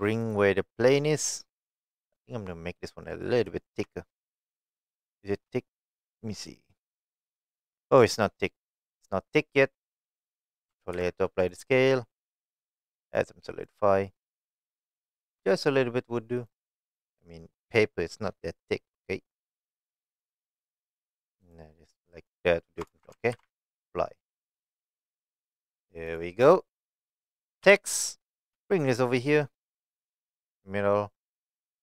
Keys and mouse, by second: 0.2 click, 0.5 middle click, 3.0 middle click, 3.7 shift+middle click, 4.7 shift+middle drag, 5.3 shift+middle click, 5.5-6.0 middle drag, 6.6-7.6 shift+middle drag, 8.7 middle click, 11.5 ctrl+a, 12.2-13.3 drag, 13.7 middle click, 14.8-15.3 shift+middle drag, 17.7-20.4 middle drag, 22.1 middle click, 23.3 ctrl+a, 23.8-24.2 middle drag, 24.4 click, 26.1 click, 26.7-27.1 middle drag, 27.6 KP_1, 28.5 g.